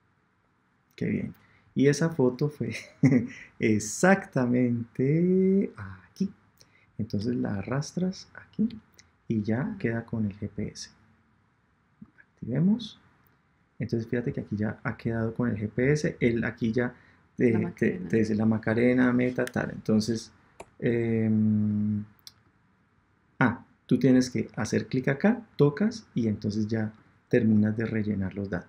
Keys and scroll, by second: 20.5 Return.